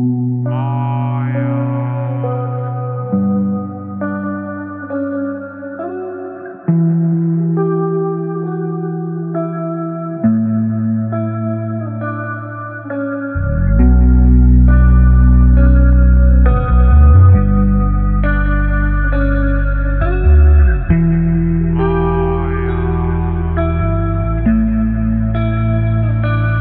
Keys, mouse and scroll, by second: 2.1 ctrl+t, 4.4-7.5 shift+drag, 7.5 Return, 9.4-15.9 alt+drag, 15.9 ctrl+t, 18.3-21.8 shift+drag, 21.8 Return, 23.6 space, 23.7 click, 24.1 space, 25.8 click, 26.3 space.